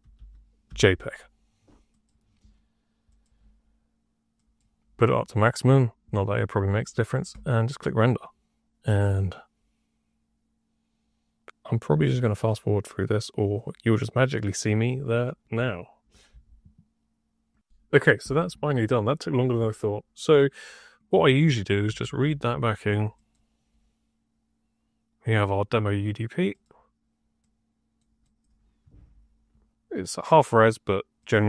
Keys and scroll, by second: 0.6 g, 21.8 Tab, 21.9-22.8 typing, 28.7 2, 31.1-31.4 typing.